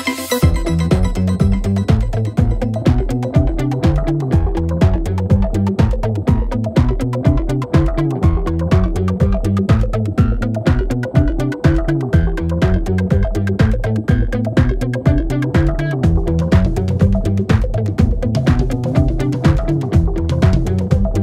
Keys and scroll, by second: 2.9 4, 3.8 ctrl+d, 3.9 Escape, 6.1 4, 6.9 ., 11.1 1, 11.3 Return, 12.5 1, 12.7 Return, 13.5 ], 14.1 1, 14.3 Return, 14.9 ], 15.6 1, 15.8 Return, 17.4 ], 18.1 ., 19.3 ., 20.7 4.